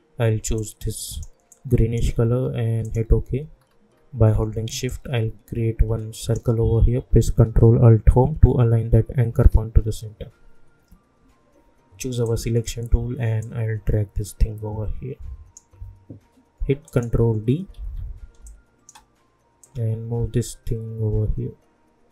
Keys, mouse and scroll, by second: 3.6-4.4 alt+scroll up 1, 4.9-9.2 drag, 9.2 ctrl+alt+Home, 12.2-16.8 drag, 17.7 ctrl+d, 18.4 space, 18.7 click, 18.9 space, 19.6-22.1 drag.